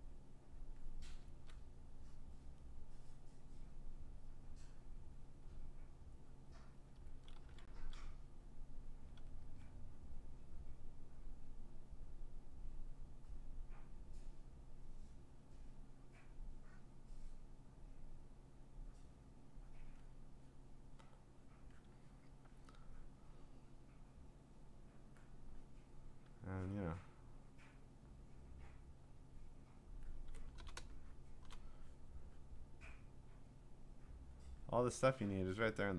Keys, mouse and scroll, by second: 0.7 click, 1.2 [, 3.3 click, 4.5 click, 6.6 click, 7.0 [, 7.3 [, 7.8 [, 8.5 click, 9.1 ], 9.4 ], 10.0 click, 10.7 click, 12.1 click, 13.3 click, 14.3 click, 15.8 click, 16.1 click, 17.2 click, 18.0 click, 19.0 click, 19.8 click, 21.5 click, 22.0 click, 22.4 click, 22.5 click, 23.0 click, 25.1 click, 26.7 click, 28.2 click, 29.3 click, 29.8 click, 30.7 scroll, 31.3 scroll, 31.4 click, 33.0 click, 34.2 click, 34.4 click, 34.7 click, 34.9 click, 35.1 click.